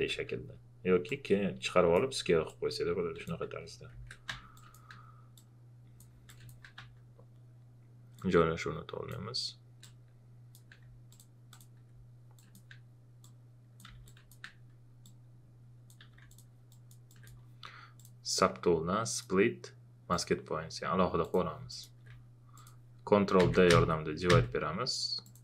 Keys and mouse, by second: 0.0 w, 1.0 click, 2.1 q, 2.4-3.9 drag, 3.9 ctrl+z, 4.3 w, 4.5 click, 5.3 click, 6.1 q, 6.3 click, 6.8 w, 8.4-11.1 drag, 13.2 click, 13.9 q, 14.0 click, 15.0 click, 15.9 q, 16.3 alt+click, 23.4 ctrl+d, 25.2 click.